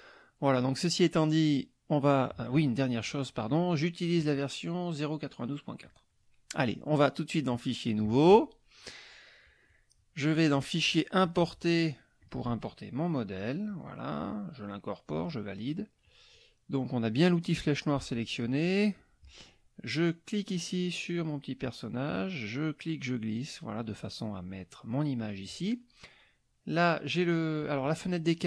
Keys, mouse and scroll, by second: 3.5 click, 4.2 click, 5.8 click, 7.5 click, 8.0 click, 10.5 click, 11.2 click, 12.2 click, 13.2 click, 15.0 click, 21.2-25.1 drag, 27.6 click.